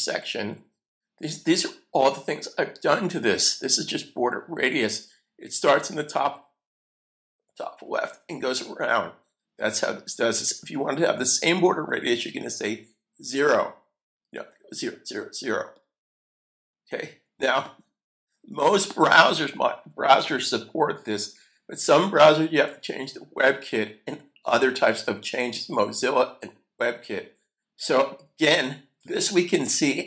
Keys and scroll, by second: 20.0 super+s.